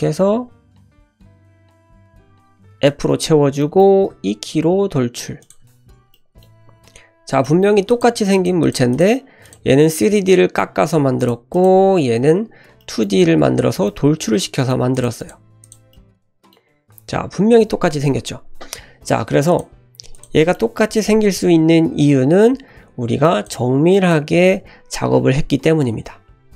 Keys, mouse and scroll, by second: 1.2 KP_Decimal, 1.8 middle click, 2.0 middle click, 2.9 f, 3.6 middle click, 4.1 e, 5.6 Tab, 5.9 scroll down 1, 6.1 middle click, 6.5 `, 7.4-7.9 shift+middle drag, 7.9 click, 8.3 click, 8.6 click, 8.9 click, 9.4 click, 9.9-10.7 middle drag, 10.7 g, 11.5 click, 12.8 shift+middle drag, 13.8-14.7 middle drag, 14.7 drag, 15.1 click, 15.6 click, 15.9-16.5 middle drag, 17.0 `, 19.5 click, 20.1 shift+click, 20.4 shift+middle drag, 22.6 Tab, 23.2 click, 23.9 click, 26.4 Tab.